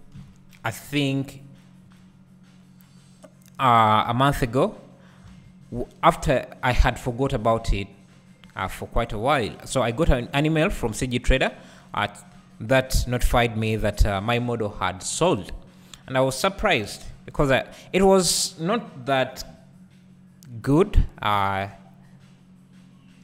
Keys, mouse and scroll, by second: 0.2 KP_1, 1.8-2.6 scroll up 2, 2.6 scroll up 1, 2.7-4.4 scroll down 1, 4.4 z, 5.3 alt+a, 5.7 scroll down 1, 6.8 z, 8.4-8.7 scroll up 1, 9.6-10.4 scroll up 1, 10.4 3, 10.9-12.1 drag, 13.5 KP_1, 15.0-16.9 scroll down 2, 16.9 e, 20.9 right click, 22.2-23.2 scroll up 2.